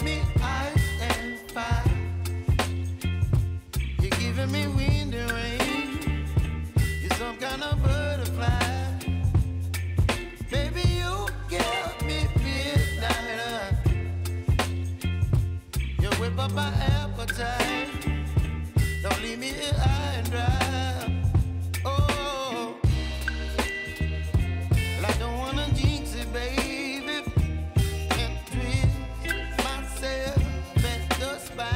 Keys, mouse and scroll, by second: 2.8 ctrl+d, 3.5 click, 4.7 s, 5.6 click, 6.5 Return, 7.4-7.8 alt+scroll up 1, 8.0 click, 9.3 ctrl+d, 9.7-11.7 drag, 11.7-12.7 scroll down 1, 12.7 click, 13.1-14.4 scroll down 1, 14.4 click, 17.5 u, 19.3-27.9 drag, 30.0 s, 30.5-31.7 drag.